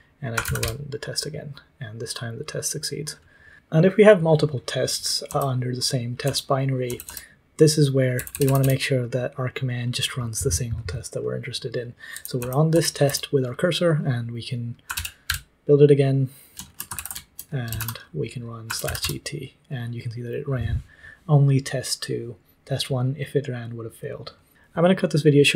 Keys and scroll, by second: 0.0-1.0 typing, 5.2 k, 6.2 k, 6.8 k, 7.0 k, 8.1 j, 8.2 j, 8.4 j, 8.5 j, 10.5 typing, 11.8-13.5 typing, 14.5-15.7 typing, 16.9 ctrl+j, 17.4-20.9 typing.